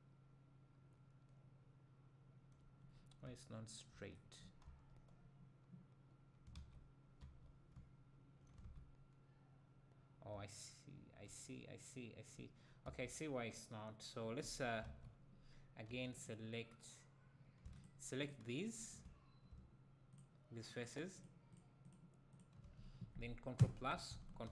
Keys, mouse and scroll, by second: 2.9-3.3 scroll down 2, 3.3 `, 4.6 a, 6.5 alt+a, 7.2 a, 7.7 `, 8.6 alt+a, 10.4 `, 12.8 a, 14.8 alt+a, 16.2 click, 17.8 shift+click, 23.5 ctrl+KP_Add.